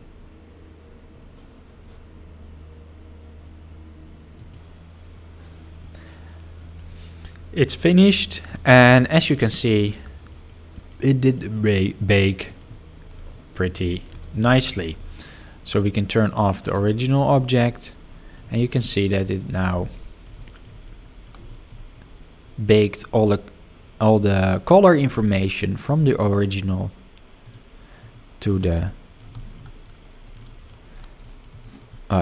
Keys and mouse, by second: 8.3 middle click, 9.9 middle click, 10.4 middle click, 10.7 middle click, 11.3 middle click, 11.8 middle drag, 12.2 middle drag, 13.7 middle click, 16.3 click, 17.0-18.3 middle drag, 18.5 shift+middle drag, 18.9-19.2 middle drag, 19.4 shift+middle click, 19.9-20.2 middle drag, 20.4 shift+middle drag, 20.8-21.2 middle drag, 21.4 shift+middle drag, 21.9-22.6 middle drag, 24.1-24.5 middle drag, 24.7 shift+middle click, 25.8 drag, 26.2 click, 27.4 click, 28.0 click, 28.8-29.1 middle drag, 29.3 shift+middle drag, 30.3 middle drag, 31.2 middle drag, 31.6 shift+middle drag.